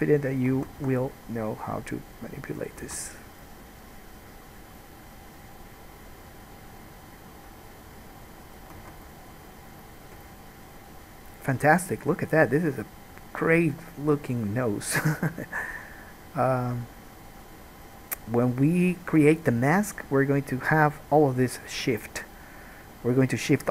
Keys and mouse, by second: 0.7 alt+a, 1.1 1, 1.8-3.7 middle drag, 1.8-3.7 right drag, 3.1 alt+a, 9.0 alt+a, 16.4-18.8 middle drag, 18.8 shift+click, 19.3-23.7 middle drag.